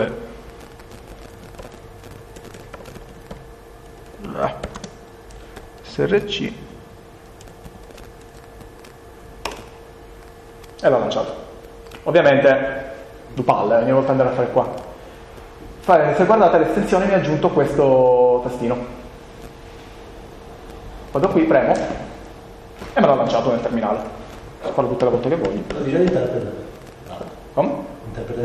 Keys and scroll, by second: 1.4 p, 3.8 BackSpace, 4.7 n, 5.3 s, 5.7 r, 9.4 Return.